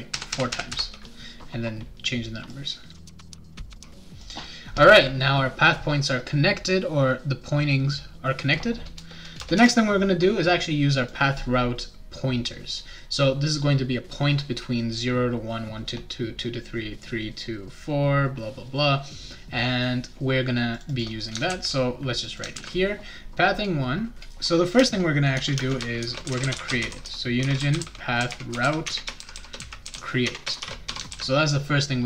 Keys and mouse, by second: 0.1 ctrl+v, 0.3 ctrl+v, 0.5 ctrl+v, 0.7 ctrl+v, 2.5 click, 2.7-4.3 typing, 3.0 click, 3.1 click, 3.2 click, 3.5 click, 3.6 click, 3.7 click, 4.2 click, 9.3 Return, 9.5 Return, 11.0 click, 20.7 click, 20.9 click, 21.5 ctrl+c, 22.2 click, 22.5 ctrl+v, 24.8-31.4 typing.